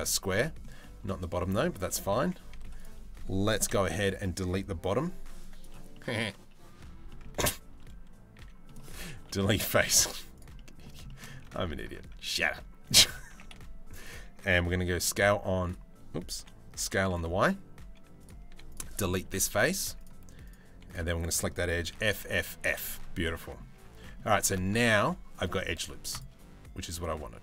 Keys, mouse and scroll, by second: 0.4 shift+middle click, 1.1 middle click, 2.2 z, 3.3 KP_3, 4.6 b, 5.6 middle click, 6.7 middle click, 8.8 Delete, 9.5 middle click, 9.7 z, 10.2 middle click, 10.7 shift+middle click, 11.3 ctrl+r, 12.9 s, 14.1 s, 16.0 o, 16.4 s, 18.1 3, 18.3 click, 18.9 Delete, 20.3 2, 21.6 f, 21.8 f, 22.8 middle click, 23.4 Tab, 23.6 Tab, 23.7 middle click, 24.3 ctrl+r.